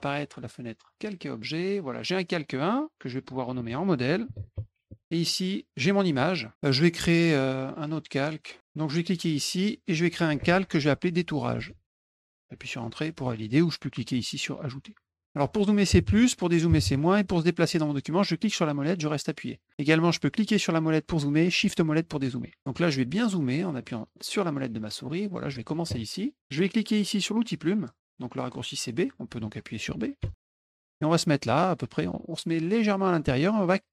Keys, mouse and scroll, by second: 0.8 click, 3.1 click, 3.3 click, 4.0-5.2 typing, 6.1 click, 6.8 click, 9.3 click, 11.3-12.7 typing, 14.9 click, 18.3-19.6 middle drag, 20.3 middle click, 20.5 middle click, 21.7 shift+middle click, 23.8 middle click, 23.8-24.2 scroll, 24.1 middle click, 24.4 middle click, 24.8 middle click, 30.2 b.